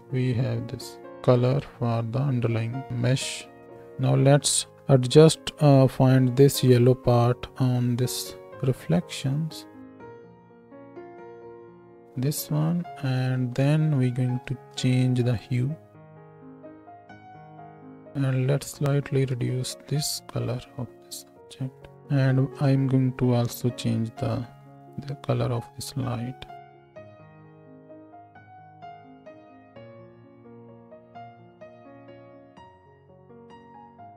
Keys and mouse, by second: 3.7 space, 8.7-18.9 shift+drag, 18.9-22.0 middle drag, 22.0 click, 22.7-24.6 middle drag, 24.6 click, 24.7-29.7 middle drag, 29.7 right click, 30.0 click, 30.2-31.2 middle drag, 31.2-34.1 drag, 31.8 space, 32.5 space, 33.1 Home, 33.5 space.